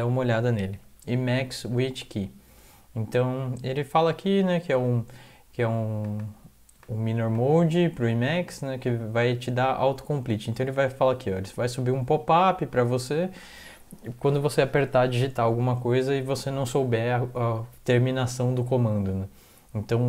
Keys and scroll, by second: 18.8 alt+Tab.